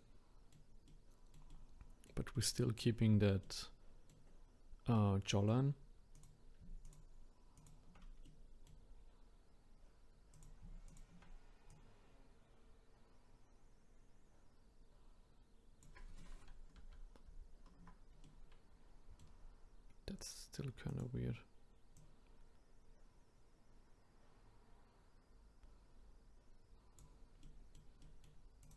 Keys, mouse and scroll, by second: 3.0-3.4 scroll up 1, 3.4-6.1 middle drag, 6.1 click, 6.8-7.6 shift+drag, 8.2-10.3 middle drag, 10.3-14.7 drag, 16.8 ctrl+z, 17.2 ctrl+z, 18.2-20.9 middle drag, 20.9 click, 21.9 click, 27.4-28.6 middle drag, 28.6 click.